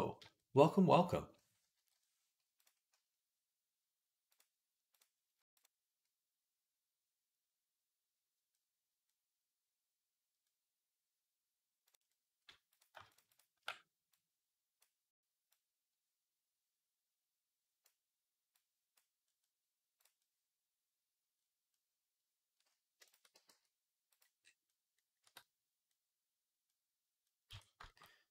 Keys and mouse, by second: 0.0-2.4 shift+middle drag, 2.4 click, 4.2-5.4 drag, 11.7 click, 12.5 click, 12.6 middle click, 12.9 alt+shift+click, 13.0 alt+shift+middle click, 13.1 alt+shift+click, 13.2 alt+shift+middle click, 14.0-19.8 drag, 19.8-28.3 middle drag, 23.2 g, 25.1 Tab, 27.3 Tab.